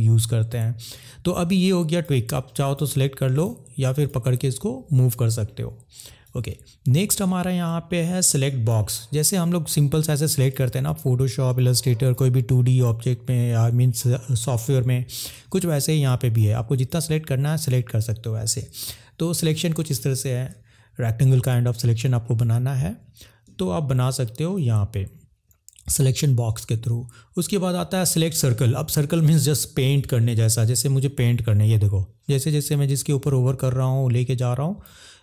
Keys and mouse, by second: 1.0-2.0 drag, 2.6 click, 3.3 click, 3.9 click, 6.3-8.8 drag, 9.4 click, 11.2 click, 12.1 click, 15.8 click, 16.9 drag, 22.3 middle click, 24.6-28.4 drag.